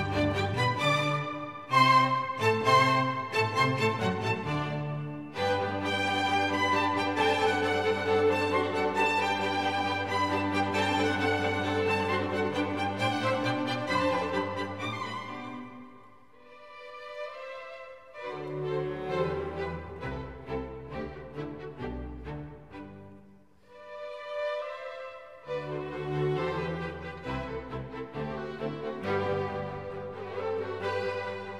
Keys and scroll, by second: 3.0 super+d, 14.7 super+d, 17.9 super+d, 18.3 super+d, 18.6 super+d, 28.3 super+d.